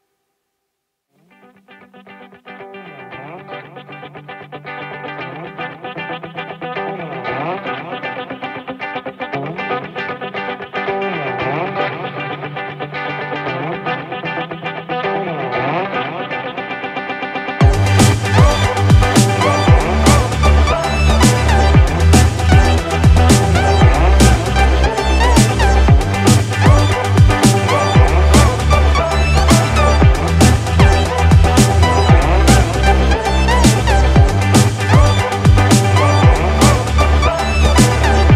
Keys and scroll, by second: 4.3 ctrl+z, 9.2 ctrl+-, 9.4 ctrl+=, 19.9 ctrl+z, 33.2 ctrl+=, 35.6 ctrl+-.